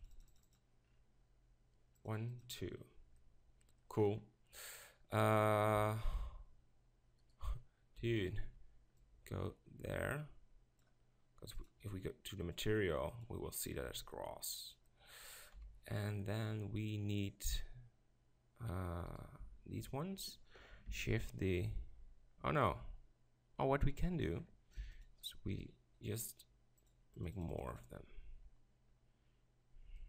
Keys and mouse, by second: 3.3 middle drag, 4.7 right click, 5.7 KP_7, 11.7 click, 15.5 KP_7, 19.0 KP_7, 21.0 shift+d, 24.9 x.